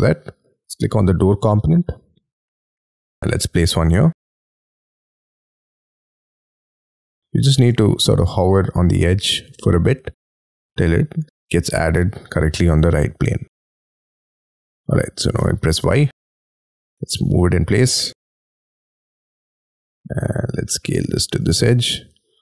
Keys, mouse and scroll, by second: 2.5-3.5 scroll up 10, 7.1 scroll up 5, 7.4 middle click, 13.7 middle click, 14.3 scroll down 2, 15.4 y, 16.9 m, 17.1 scroll up 4, 18.9 shift+click, 19.4 scroll down 3, 19.6 s.